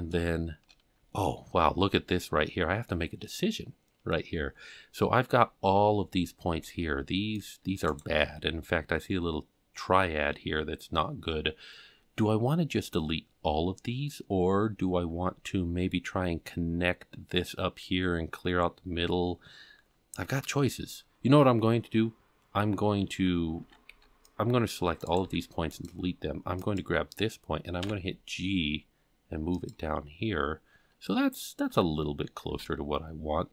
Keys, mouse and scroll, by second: 1.5-1.9 scroll up 4, 5.8 c, 8.3-8.8 scroll up 3, 13.2-13.7 scroll down 4, 14.8-15.3 scroll up 2, 23.6 alt+a, 23.9 c, 25.3 x, 26.6 click, 27.8 g, 30.2-30.9 scroll down 1, 30.9-31.7 scroll down 1, 31.7 a, 32.6 alt+a.